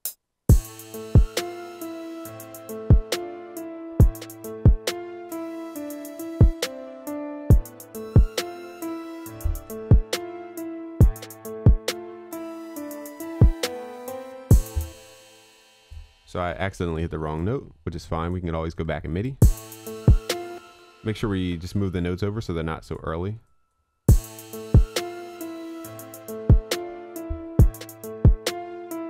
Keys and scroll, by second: 21.4 ctrl+a.